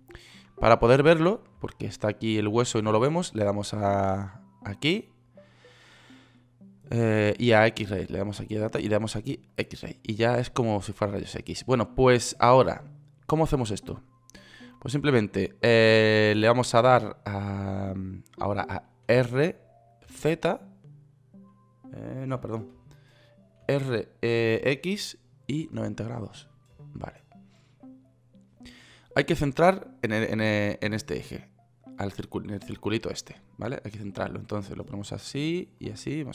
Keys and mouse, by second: 19.5 r, 24.0 r, 31.2 KP_1.